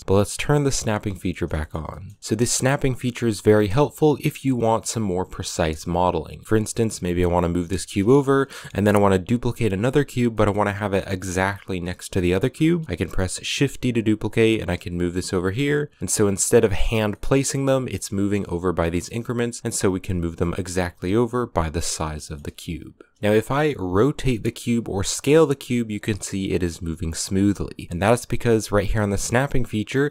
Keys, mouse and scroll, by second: 0.7 click, 1.1 shift+middle click, 1.7 scroll up 1, 1.8-2.2 shift+middle drag, 7.7-8.0 scroll down 1, 8.0-10.4 shift+middle drag, 10.4-12.1 scroll up 1, 12.1-12.4 scroll up 1, 12.4-13.4 shift+middle drag, 13.4 shift+d, 16.9-17.3 middle drag, 17.3 scroll up 2, 17.4 a, 17.6 right click, 18.0 shift+d, 19.8 scroll down 2, 20.1 g, 22.0-23.3 shift+middle drag, 23.3 r, 25.0 s, 28.7-30.1 drag.